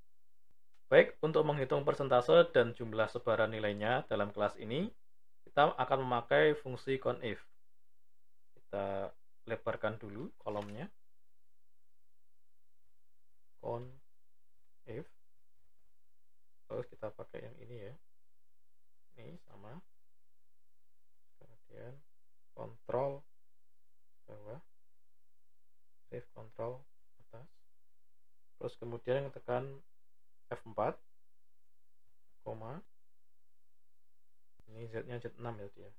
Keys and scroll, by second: 13.5 typing, 22.4 ctrl+Down, 25.9 ctrl+shift+Up, 30.3 F4.